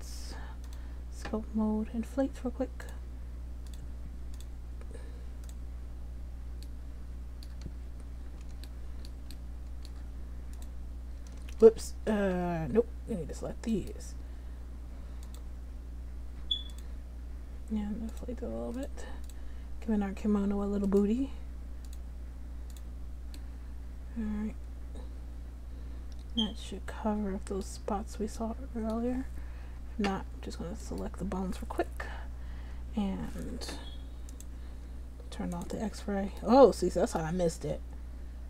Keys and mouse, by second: 0.9-3.6 drag, 6.2-7.3 middle drag, 12.4 ctrl+z, 13.9 click, 17.3-22.6 drag, 22.0 right click, 23.5 middle click, 23.6 click, 24.1 middle click, 24.2 click, 24.3 middle click, 24.4 middle click, 28.0 middle click, 28.7 click, 30.1 click, 31.0-34.5 drag, 34.5-37.7 middle drag.